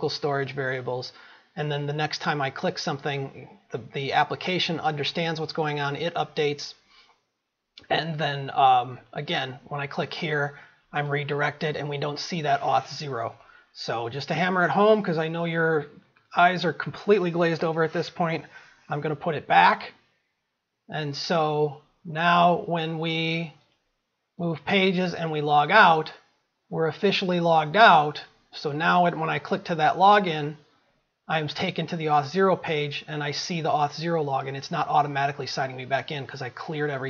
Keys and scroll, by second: 19.4 ctrl+s.